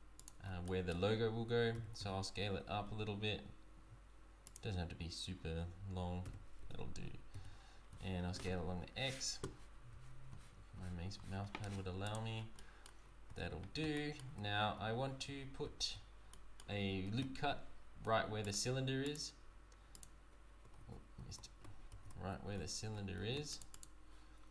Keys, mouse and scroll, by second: 0.4 scroll down 4, 0.6 middle click, 5.3-6.2 scroll up 1, 12.3 scroll down 3, 12.5 middle click, 13.0-13.3 scroll up 3, 13.3 Tab, 13.9 middle click, 14.8 z, 15.6 z, 16.3 middle click, 17.0 ctrl+r, 20.8 ctrl+z, 21.2 ctrl+z, 21.9 ctrl+r, 22.5 Tab, 23.1 ctrl+r.